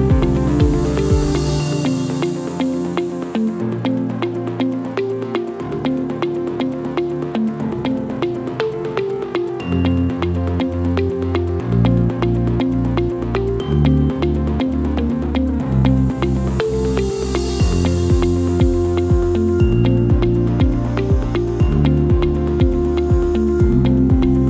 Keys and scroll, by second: 5.8 KP_3, 6.0 KP_0, 6.0 Return.